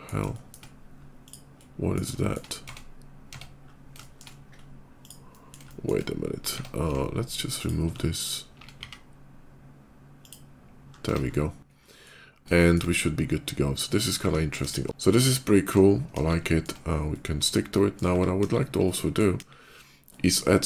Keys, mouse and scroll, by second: 0.1 shift+middle click, 1.0 click, 1.3 middle click, 2.0 middle click, 2.4 Tab, 4.1 shift+middle click, 4.7 shift+click, 5.0 shift+middle click, 5.5 shift+middle click, 6.3 Tab, 7.4 click, 8.0 click, 8.6 x, 9.9 click, 10.7 middle click, 10.9 Tab, 11.1 middle click, 11.2 middle click, 11.6 middle click, 12.1 middle click, 12.4 shift+middle click, 12.7 shift+middle click, 14.3 KP_5, 14.7 KP_5, 14.8 middle click, 16.3 middle click, 16.9 middle click, 18.2 KP_5, 18.7 middle click, 19.5 middle click, 19.9 middle click, 20.3 shift+middle click.